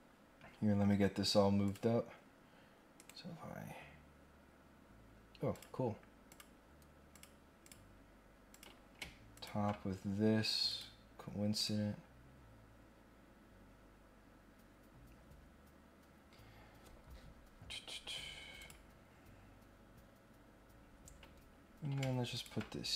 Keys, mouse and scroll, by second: 0.7 scroll down 1, 1.6 click, 3.0 right click, 5.5 click, 6.2 click, 7.1 click, 7.6 click, 8.5 click, 9.3 ctrl+click, 10.6 click, 11.5 click, 13.5 scroll up 1, 18.5 click, 20.6 scroll down 1, 20.7-21.8 scroll up 3, 22.3 ctrl+click.